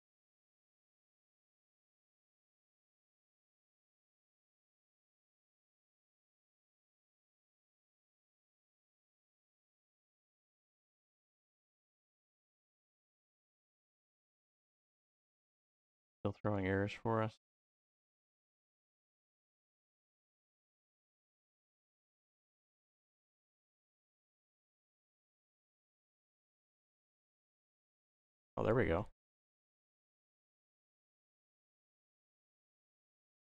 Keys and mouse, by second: 3.1 click, 4.2 drag, 5.3-5.9 drag, 6.5 click, 7.4 click, 9.0-11.1 drag, 15.8 click.